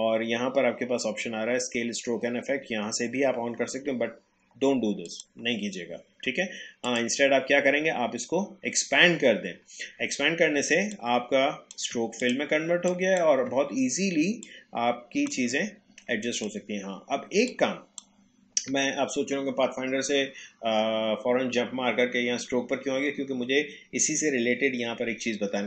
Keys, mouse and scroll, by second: 5.1 click, 10.6 click, 10.9 shift+click, 14.4-20.5 shift+drag.